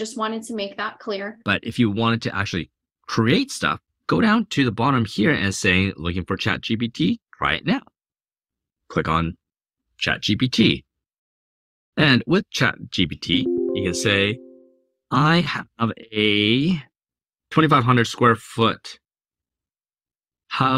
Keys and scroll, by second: 14.6-15.8 typing, 17.2-20.7 typing.